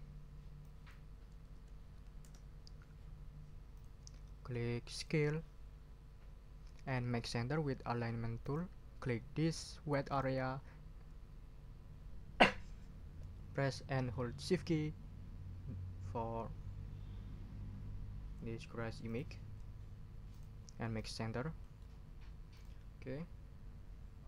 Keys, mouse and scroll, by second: 0.6 click, 1.3-2.7 typing, 3.7 click, 4.9 click, 8.4 click, 10.1 click, 19.0 shift+click, 20.3 click, 20.9 click, 21.6 click, 22.5 click.